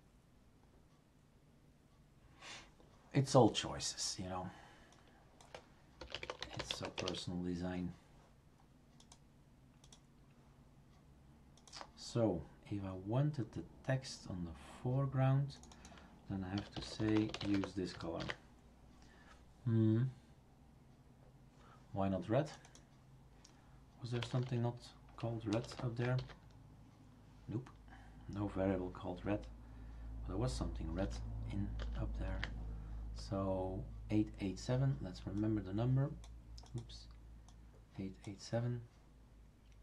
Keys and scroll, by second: 5.8-7.2 typing, 16.3-18.0 typing, 18.2 ctrl+s, 23.9-25.7 typing, 26.2 ctrl+s, 31.0 ctrl+z, 31.8 ctrl+z.